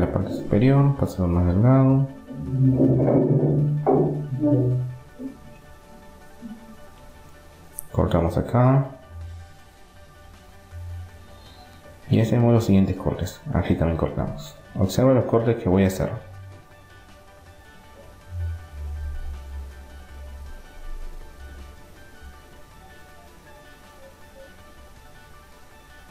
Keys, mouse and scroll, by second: 3.7-6.7 middle drag, 6.7 ctrl+r, 12.7 ctrl+r, 21.4-23.0 middle drag, 22.1 ctrl+r.